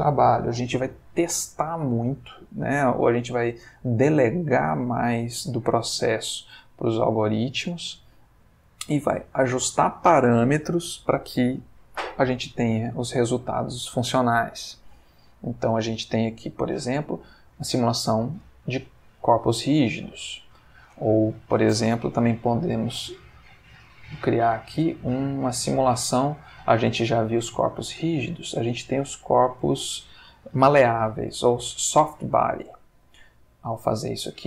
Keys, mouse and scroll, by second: 6.4 alt+a, 7.6 space, 18.4 Escape, 19.5-20.2 drag, 20.1 x, 20.4 click, 22.1 shift+a, 23.7 click, 24.7 g, 25.3-26.4 drag, 33.7 click.